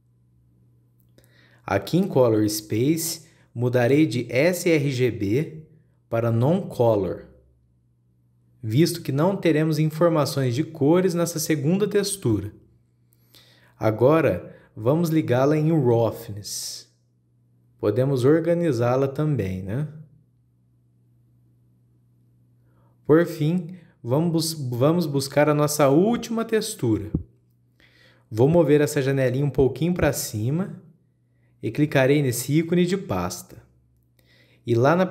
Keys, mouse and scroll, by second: 5.2-8.3 drag, 10.2 scroll up 2, 13.8-16.7 drag, 16.9 click, 19.8 click, 20.4-22.4 drag, 22.8-23.7 scroll down 5, 23.7-25.3 middle drag, 25.3-25.6 scroll up 3, 25.6 middle click, 26.2-27.1 scroll up 2, 27.1 click, 28.9-29.6 middle drag, 29.6-31.3 drag, 31.3-31.9 middle drag, 31.9-35.1 drag.